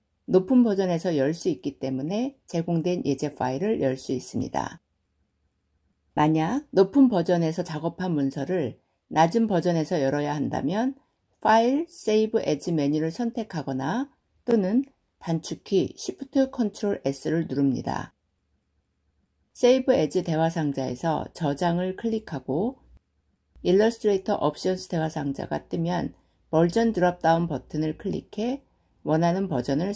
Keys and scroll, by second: 15.3 ctrl+shift+s.